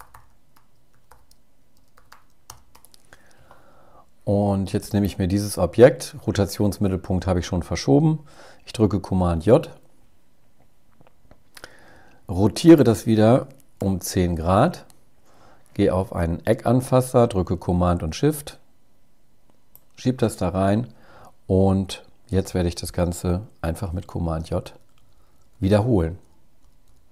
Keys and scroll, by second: 8.3 super+j, 13.9 shift+Up, 22.8 super+j, 23.5 super+j, 24.6 super+j, 25.1 super+j, 25.7 super+j, 25.9 super+j, 26.7 super+j.